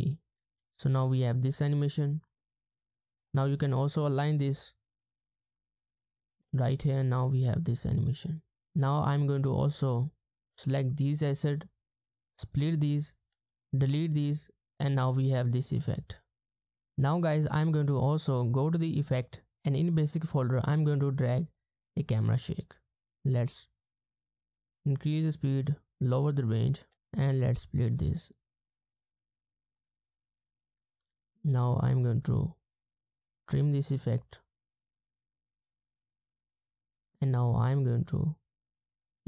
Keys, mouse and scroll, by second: 0.6 space, 1.5 space, 2.4 space, 3.6-3.9 ctrl+scroll up 1, 7.2 space, 8.5 double click, 13.9 Delete, 15.6 space, 16.7 space, 23.0 space, 26.8 space, 26.9 space, 31.0 BackSpace, 31.3 space, 37.7 double click.